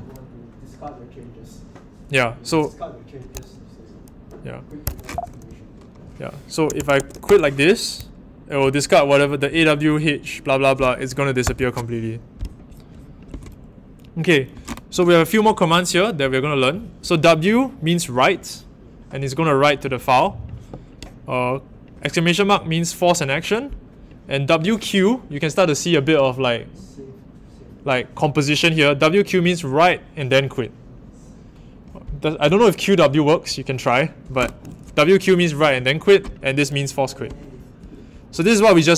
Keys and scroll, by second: 4.6-7.7 typing, 11.4 Return.